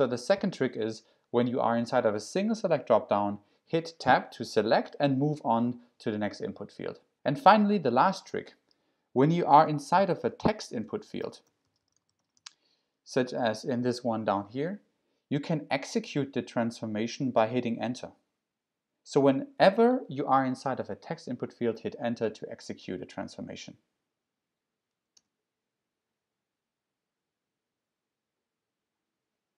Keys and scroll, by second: 9.3-13.9 typing, 25.2 Return.